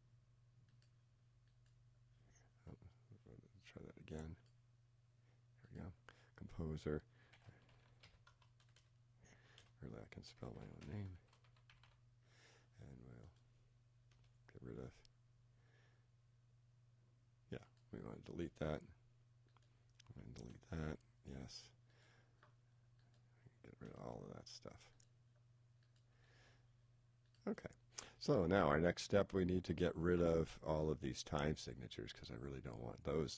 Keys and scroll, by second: 7.3 shift+g, 11.1 shift+h.